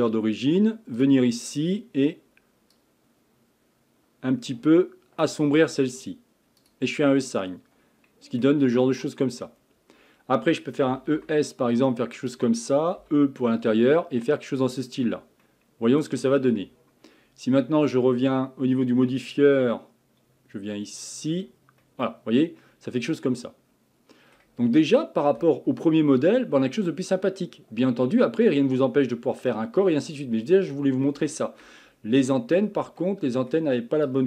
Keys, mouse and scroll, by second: 1.0 click, 1.4 click, 6.6-7.2 drag, 7.2-8.7 middle drag, 8.7-9.2 scroll up 2, 9.2-10.9 scroll down 1, 10.9 e, 13.0 e, 15.0-15.4 scroll down 3, 15.4-18.4 middle drag, 19.3 click, 21.5 click, 21.8-24.6 middle drag, 24.6 scroll down 1, 25.0 middle click, 25.4 Tab, 25.8-28.9 middle drag, 31.3-31.9 shift+middle drag, 31.9 scroll up 4, 32.2 Tab, 32.5 scroll down 2, 33.0-34.0 shift+middle drag, 34.0 click.